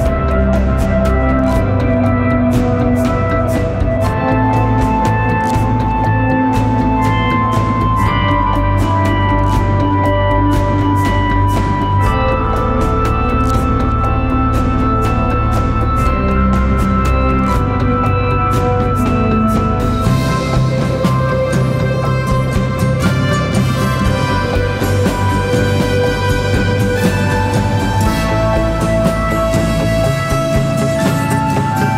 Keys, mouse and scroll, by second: 0.8-1.7 typing, 0.9 click, 1.5 click, 1.9 click, 3.9-4.3 scroll up 1, 4.3 space, 4.4 click, 4.8 space, 5.6 click, 7.8-10.9 alt+drag, 13.7-14.8 typing, 13.8 click, 15.2 click, 16.3-19.0 alt+shift+drag, 19.6-23.0 typing, 20.4 click, 20.8 click, 21.8 click, 22.1 click, 22.7 click, 23.1 click, 24.7 right click, 25.5 click.